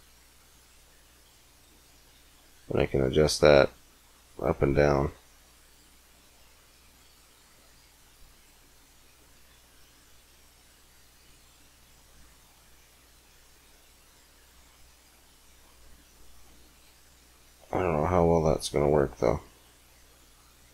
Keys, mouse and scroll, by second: 20.1 middle click.